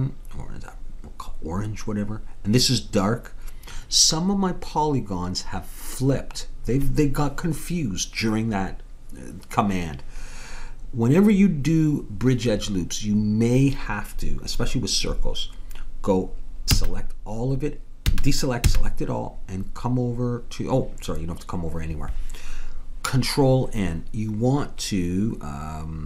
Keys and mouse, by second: 16.7 a, 18.1 a, 18.7 a.